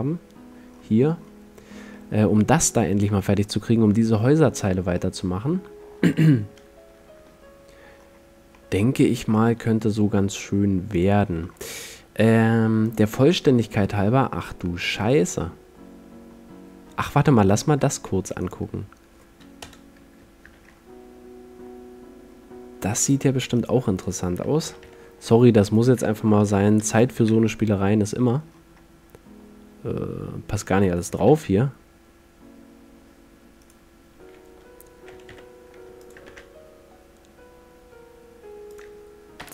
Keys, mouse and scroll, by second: 0.8-7.0 middle drag, 8.1-10.6 middle drag, 11.0-12.8 drag, 13.6-14.3 drag, 14.3 click, 14.8-17.5 middle drag, 18.6-19.8 drag, 19.8 KP_0, 20.8 shift+f, 24.8 g, 25.0-26.1 drag, 26.5 g, 27.4 shift+f, 30.8-32.7 drag, 31.2 g, 33.8-35.7 drag, 35.2 g, 36.4 shift+f, 38.9 click.